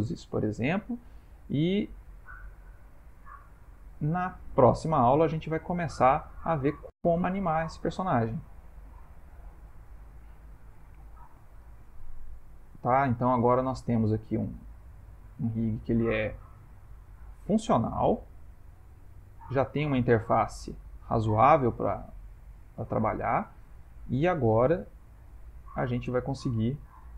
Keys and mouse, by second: 2.3 click, 3.0 middle click, 3.1 middle click, 3.8 ctrl+middle click, 3.9 ctrl+middle click, 4.7 middle click, 5.6 ctrl+middle click, 6.4 shift+middle click, 8.9 click, 10.4 click, 11.0 shift+middle click, 12.2 click, 12.7 s, 15.3 click, 15.8 g, 17.5 click, 18.2 r, 19.7 click, 20.3 r, 23.9 click, 24.5 s, 25.7 click.